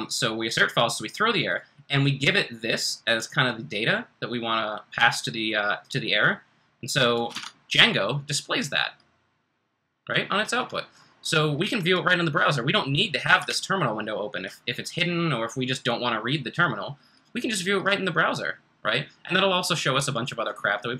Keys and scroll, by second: 7.3 super+Tab, 13.4 super+Tab.